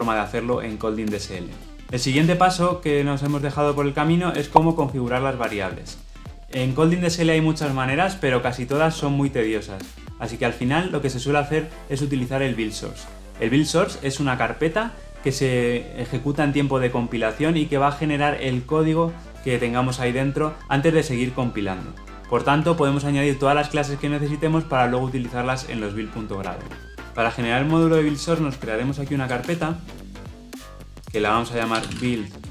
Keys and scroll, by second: 29.4 alt+Insert.